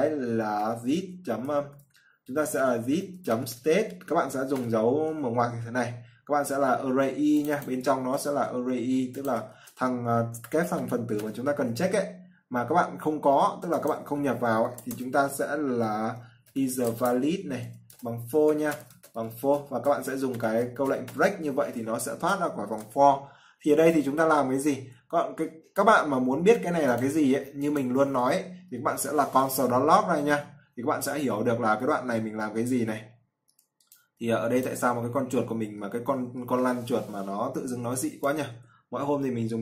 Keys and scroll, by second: 8.6 ctrl+c, 9.8 ctrl+v, 22.8 ctrl+s.